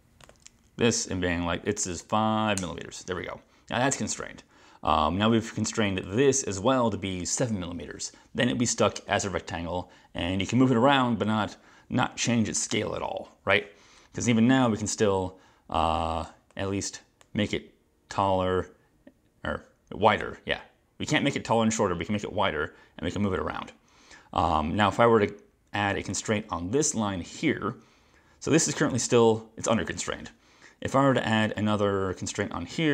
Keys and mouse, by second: 2.1 5, 2.7 Return, 6.1 click, 26.2 click, 28.0 click, 29.0 click, 31.5 click.